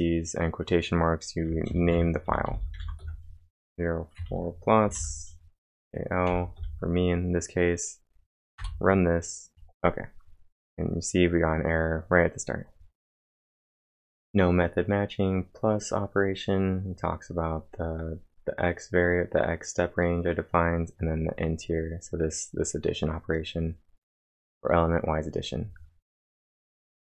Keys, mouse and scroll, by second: 2.6-3.3 typing, 6.3 shift+", 6.6 shift+), 8.6 Return, 10.5 scroll up 1.